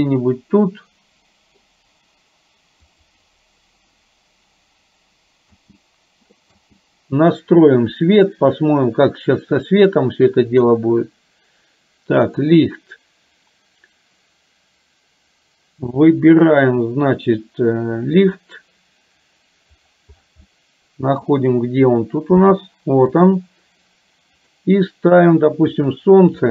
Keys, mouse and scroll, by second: 3.2 click, 5.6 space, 6.5 space, 18.3 click, 20.5 middle click, 22.5 g, 24.6-25.9 drag.